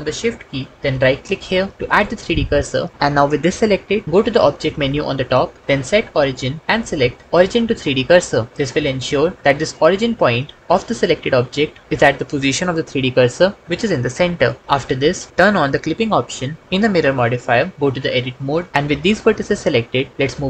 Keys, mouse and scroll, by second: 1.2 shift+middle click, 5.0-8.3 drag, 11.8 ctrl+z, 18.1 Tab, 20.1 g.